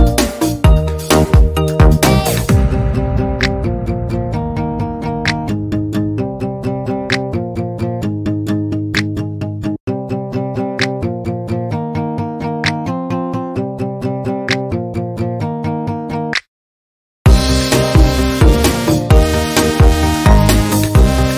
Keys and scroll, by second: 4.6 Down, 4.9 Up, 5.5 Up, 8.9 Down, 9.1 Up, 11.2 Down, 12.9 Up, 18.6 Down, 19.2 Up.